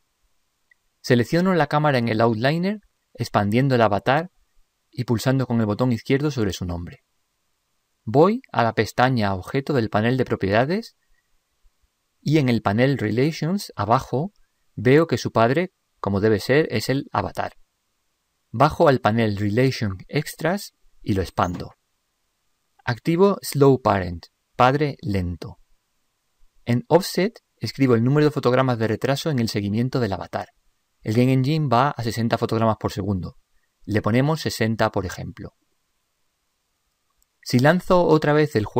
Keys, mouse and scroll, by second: 3.3-6.5 drag, 7.4-9.1 drag, 10.1-13.1 drag, 17.5-19.1 drag, 20.3-23.0 drag, 24.1-25.8 drag, 34.0-35.7 drag, 36.0 click, 38.6 p.